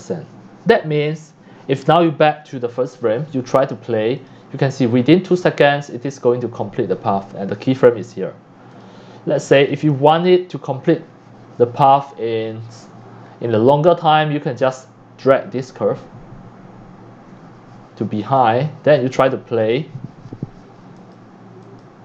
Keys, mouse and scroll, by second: 2.7 click, 4.2 click, 8.7 click, 9.5 click, 10.2 click, 14.7-16.2 drag, 18.4-18.9 drag, 20.7 click, 21.6-22.0 drag.